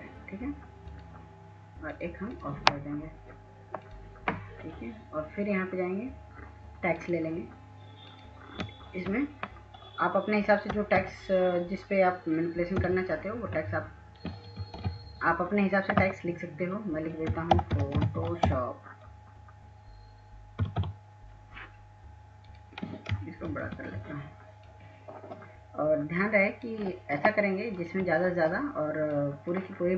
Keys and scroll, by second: 10.7-11.1 typing, 12.6-13.3 typing, 14.8 ctrl+a, 17.1-19.0 typing, 20.4-21.1 typing, 23.5 ctrl+t.